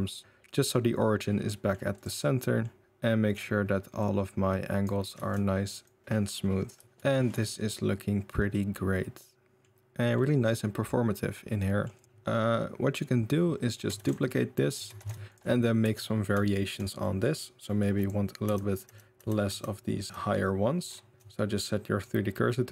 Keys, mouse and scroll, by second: 0.9-1.7 middle drag, 1.9 click, 2.4 middle drag, 2.8 click, 3.9 click, 5.1 ctrl+z, 5.8-6.8 drag, 7.1 shift+middle drag, 8.7 middle drag, 9.6 middle click, 10.2-11.8 middle drag, 11.8-13.6 scroll up 2, 11.9 click, 13.6 middle drag, 13.7 scroll up 1, 13.9 shift+d, 14.3 middle drag, 14.7 g, 15.1 g, 15.4 middle click, 15.8 Tab, 16.4 shift+middle click, 17.0 middle click, 17.6 middle click, 18.4-20.0 typing, 21.1 Tab, 21.1 shift+s, 21.9-22.7 middle drag.